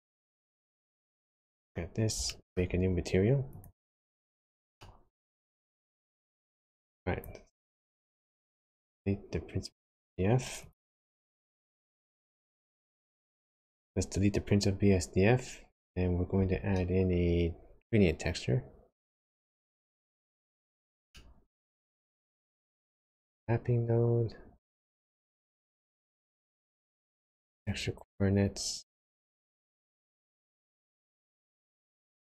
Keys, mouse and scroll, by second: 1.6 scroll up 1, 2.1 scroll down 1, 2.4 shift+middle click, 3.4 click, 4.8 middle click, 6.7 click, 8.0 x, 8.7 click, 10.6 click, 16.3 shift+a, 21.1 middle click, 22.0 scroll down 1, 22.6 shift+a, 26.3 shift+a.